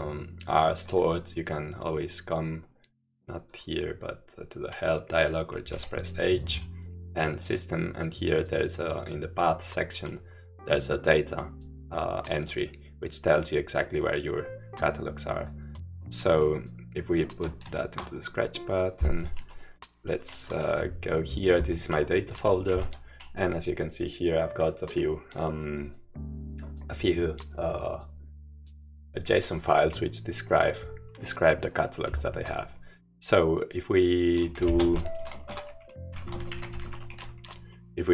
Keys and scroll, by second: 6.0 h, 17.8 shift+super+-, 22.5-23.2 typing, 34.2-37.6 typing.